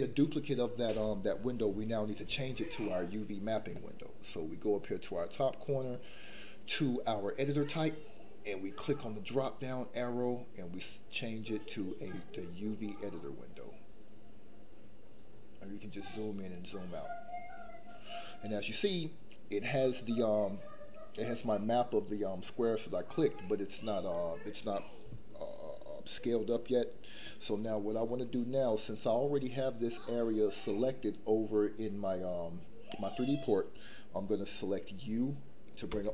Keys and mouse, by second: 9.4-12.8 drag, 35.9 u.